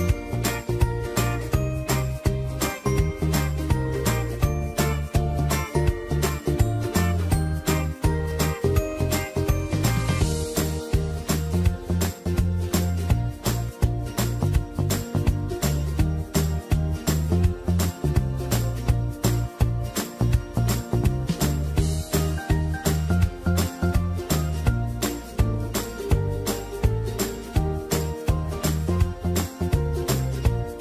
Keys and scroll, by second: 3.9 space, 5.2 space, 12.1 Right, 14.6 Right, 15.3 Up, 17.7 ctrl+t, 21.5 Return.